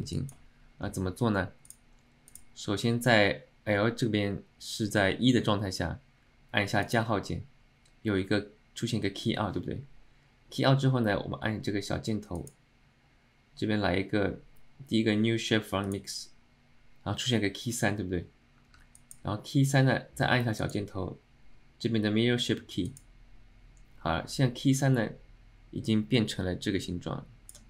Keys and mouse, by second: 0.3 alt+middle click, 1.7 click, 6.9 click, 12.5-16.1 drag, 19.1 middle click, 20.8-23.1 drag, 26.0-27.6 drag.